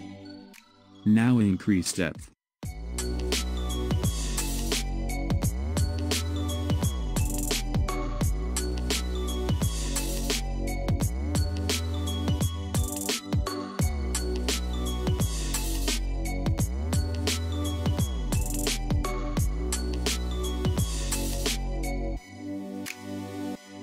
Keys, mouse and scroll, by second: 0.0-0.9 scroll down 3, 0.9-2.2 scroll down 1, 2.2-5.2 drag, 10.3-13.3 middle drag, 13.6-16.6 drag, 21.3-23.8 scroll up 2.